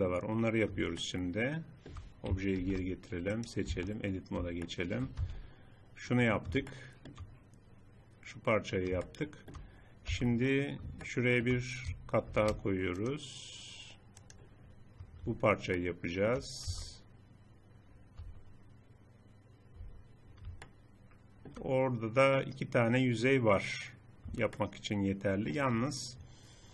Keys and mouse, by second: 2.6 alt+h, 3.7 Tab, 5.2 z, 10.2 z, 11.0 click, 12.3 ctrl+r, 15.8 click, 16.7 z, 18.2 z, 19.9 z, 24.8 middle click, 25.6 middle click.